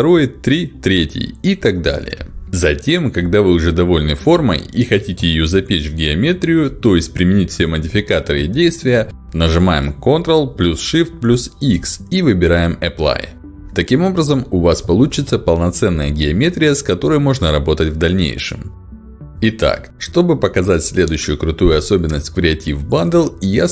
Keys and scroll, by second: 8.9 Escape, 9.7 ctrl+shift+x.